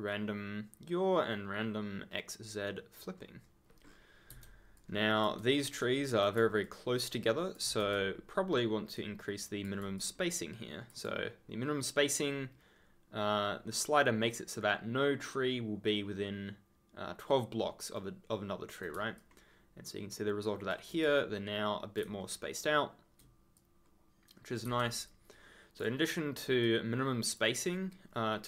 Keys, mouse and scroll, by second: 3.1 ctrl+scroll down 1, 3.4-3.8 ctrl+scroll, 3.8-4.1 ctrl+scroll down 1, 4.3 ctrl+z, 4.7 ctrl+click, 4.9 ctrl+scroll up 1, 5.2-5.8 ctrl+scroll, 5.8 right click, 6.6 ctrl+click, 6.9-7.6 ctrl+scroll up 1, 7.6 ctrl+z, 8.9 click, 9.9 ctrl+click, 10.1-10.9 ctrl+scroll down 1, 17.9 right click, 19.1 ctrl+click, 21.0 ctrl+a, 22.0 ctrl+d, 23.5 ctrl+click, 23.8-24.4 ctrl+scroll down 1, 24.4 ctrl+scroll up 1, 24.6 ctrl+z, 25.0 ctrl+click, 25.4 ctrl+scroll up 1, 26.6 click, 27.7 right click.